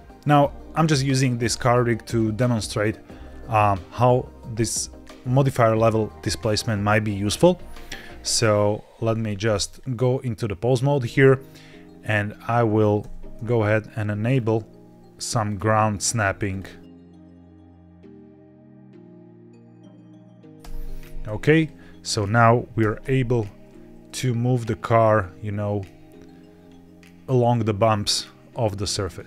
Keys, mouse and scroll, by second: 2.8-3.2 scroll up 1, 3.2 scroll down 1, 9.1 ctrl+Tab, 9.6 click, 9.8 g, 9.8 z, 10.8 click, 12.9 n, 14.1-14.5 scroll down 2, 15.3-16.6 drag, 16.8 click, 17.6-19.4 scroll down 8, 18.3 click, 19.2 middle click, 19.4 click, 19.8-20.4 scroll up 4, 20.5 n, 21.4 click, 21.9 click, 22.7 g, 22.9 y, 28.9 click.